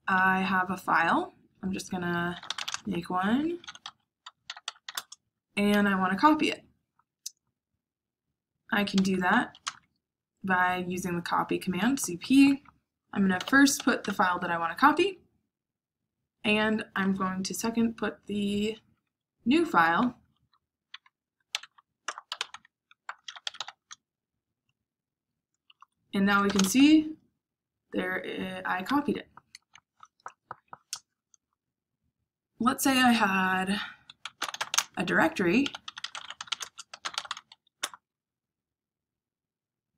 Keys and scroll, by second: 2.0-5.3 typing, 8.8-9.6 typing, 13.3-13.9 typing, 21.2-24.0 typing, 25.6 Return, 26.1-27.0 typing, 33.9-37.8 typing.